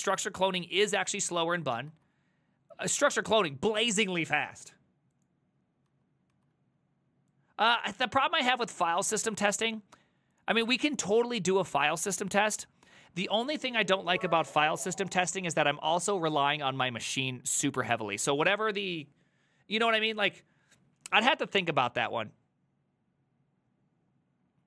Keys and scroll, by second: 1.1 ctrl+u, 1.9 ctrl+u, 5.9 ctrl+u, 6.4 ctrl+u, 13.5 alt++.